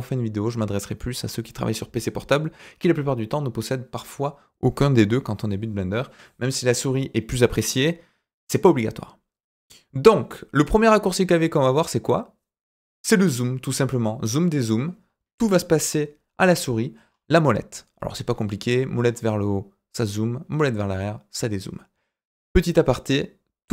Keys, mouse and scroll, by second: 16.9-20.1 scroll up 3, 20.1-23.3 scroll down 4.